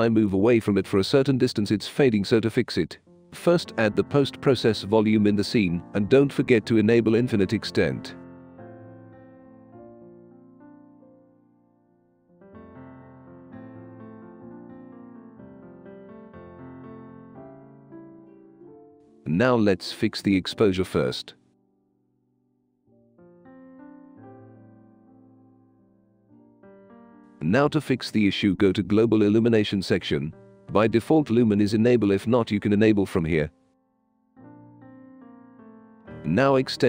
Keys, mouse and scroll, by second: 0.1-2.1 typing, 5.3-6.0 right drag, 7.7 click, 8.7 click, 9.0 click, 9.5 click, 9.8 click, 10.6 click, 12.1 click, 12.8 click, 13.6 right drag, 15.4-16.1 drag, 16.5 click, 17.2-18.4 drag, 19.5-23.6 drag, 23.7 click, 24.6 1, 25.2 4, 25.7 click, 26.5-29.0 right drag, 26.5-27.5 typing, 30.7 click, 31.4 click, 32.0 click, 32.6 click, 33.1 click, 34.1 click, 34.6 click, 35.5 click, 36.5 click.